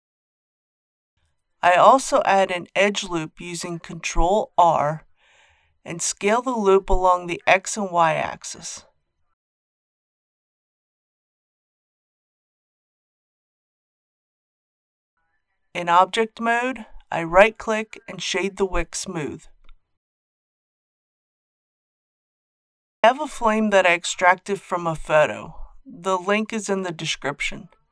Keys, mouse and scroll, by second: 2.8 ctrl+r, 3.5 click, 5.4 shift+z, 9.6 click, 13.6 Tab, 14.4 scroll down 1, 16.5 right click, 18.7 click, 19.7 scroll down 1, 20.7 KP_1, 21.7 shift+middle click, 22.8 click.